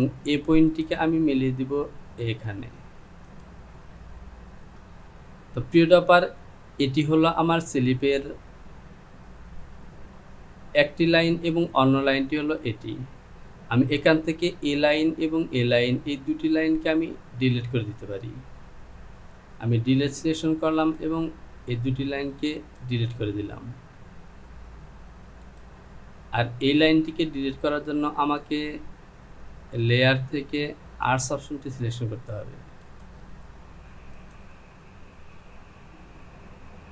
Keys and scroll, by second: 19.8 Delete, 36.4 Home.